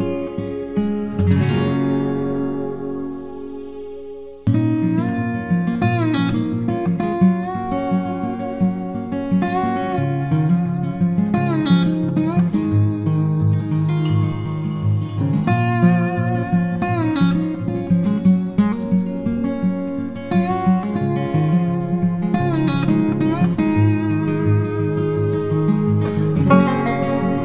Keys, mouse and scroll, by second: 0.0-0.2 typing, 1.4 typing, 2.4 double click, 10.0 [, 16.4 [.